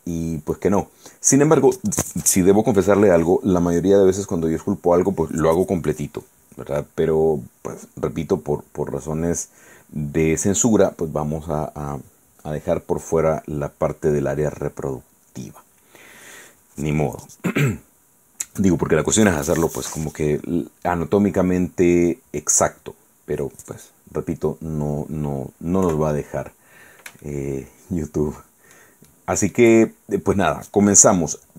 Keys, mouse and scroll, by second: 26.0 KP_1, 27.4-29.0 shift+right drag, 29.2 shift+right click.